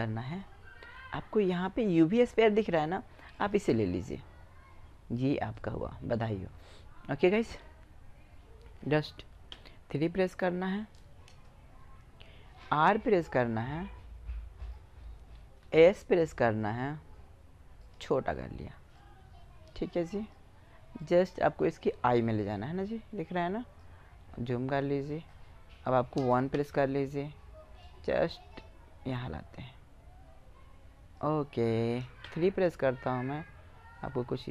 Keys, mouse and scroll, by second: 3.4-5.0 middle drag, 5.0-6.7 drag, 7.1 middle click, 8.9 KP_3, 9.1-10.4 middle drag, 12.0 r, 15.0 s, 18.3-20.2 drag, 20.4-22.4 drag, 23.7-25.9 middle drag, 25.9 KP_1, 31.6 KP_3.